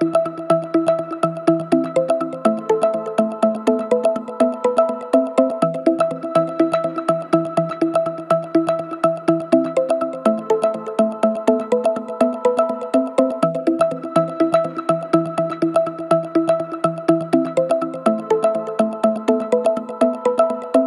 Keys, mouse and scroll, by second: 6.2 click, 9.3-17.8 drag, 10.5-11.5 shift+drag, 20.5 click.